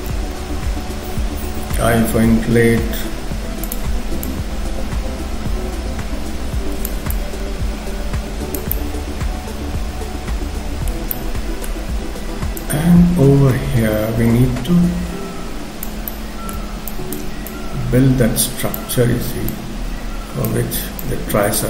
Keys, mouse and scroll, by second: 0.0 scroll up 1, 1.7 i, 2.7 f, 4.2 click, 7.1 shift+click, 8.7 middle click, 11.1 middle click, 11.8-12.6 scroll up 2, 12.6 click, 16.1 middle click, 16.9 shift+click, 17.5 shift+click, 19.5 click, 21.0 shift+click.